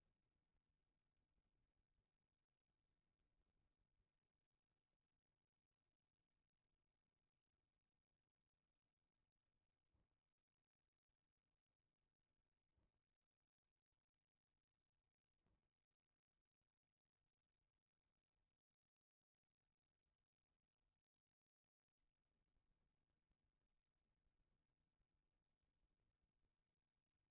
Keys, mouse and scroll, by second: 1.0-1.3 shift+middle drag, 1.6-2.0 middle drag, 5.2-7.5 drag, 7.8-8.4 shift+middle drag, 9.0 click, 18.2 click, 20.7 click.